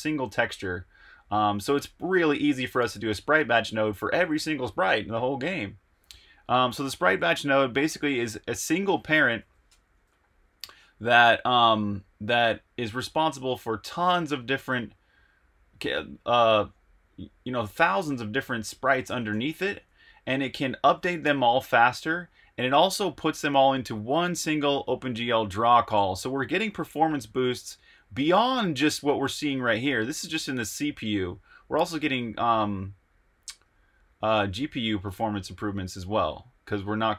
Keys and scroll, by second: 6.4 super+Tab, 9.3 v, 9.6 Return, 10.7 k, 13.9 j, 18.8-19.8 typing, 26.3 super+Tab.